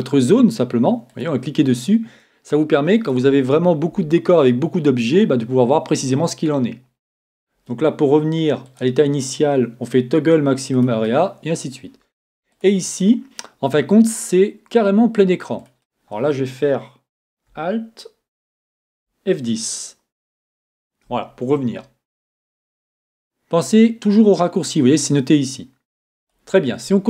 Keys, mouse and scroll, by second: 12.5-14.3 drag, 20.7 alt+F10, 22.9-24.7 drag, 26.2 click.